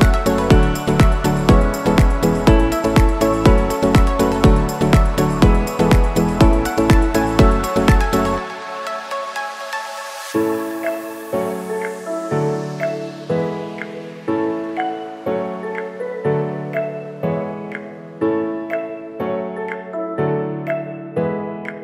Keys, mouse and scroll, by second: 0.0 scroll up 1, 0.7 click, 1.1-2.1 scroll down 1, 2.5 shift+click, 4.3 ctrl+shift+e, 6.6 click, 10.7-13.5 drag, 14.4-18.0 drag, 18.0-21.8 drag.